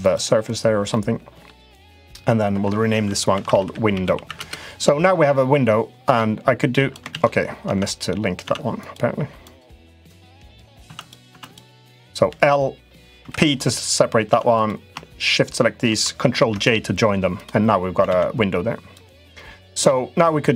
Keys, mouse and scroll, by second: 0.6 middle click, 2.3 F2, 5.8 click, 6.9 ctrl+z, 7.4 Tab, 7.7 click, 8.2 Tab, 8.6 click, 9.1 click, 9.7 Tab, 9.8 click, 10.6 Tab, 10.8 click, 11.1 Tab, 11.1 click, 12.0 l, 12.9 p, 14.0 Tab, 16.2 ctrl+j, 17.1 click, 17.9 ctrl+z, 18.7-20.0 drag.